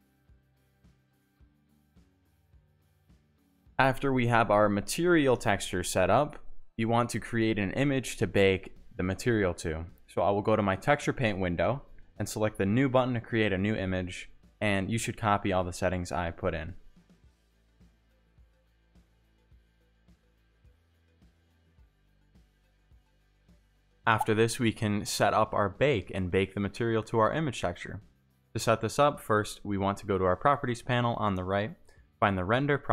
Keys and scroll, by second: 9.0-10.2 typing, 12.7 2, 12.8 0, 12.9 4, 12.9 8, 14.8 2, 14.9 0, 15.1 4, 15.1 8, 15.4 Return, 23.2 Tab, 23.3 1, 26.2 Tab, 32.7 Tab.